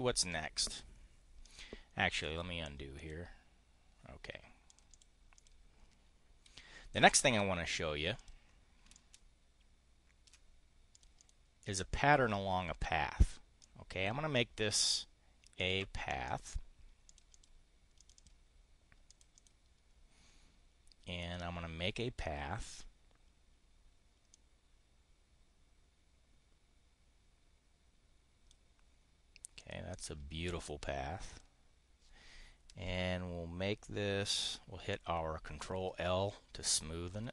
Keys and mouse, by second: 1.4 click, 2.0 click, 2.9 click, 4.7 click, 4.8 click, 5.2 click, 6.4 Delete, 8.1 click, 8.8-10.2 ctrl+drag, 10.8 click, 11.1 click, 13.6 click, 15.6 click, 16.2 click, 17.0 click, 17.2 click, 17.9 click, 19.0 click, 19.2 click, 22.5 click, 24.2-28.4 drag, 29.4 click, 29.8 click, 31.2 click, 35.6 ctrl+i, 36.0 ctrl+i, 36.5 ctrl+i, 37.2 ctrl+i.